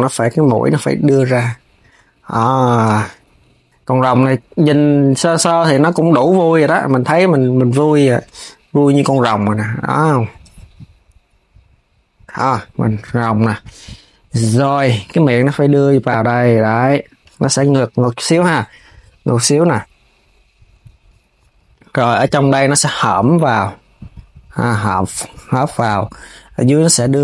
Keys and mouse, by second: 0.2 click, 2.6 s, 6.2 click, 7.6 click, 14.7 click, 15.3 click, 17.3 KP_3, 18.0 s, 21.7 click, 22.7 click, 26.1 click, 26.8 click.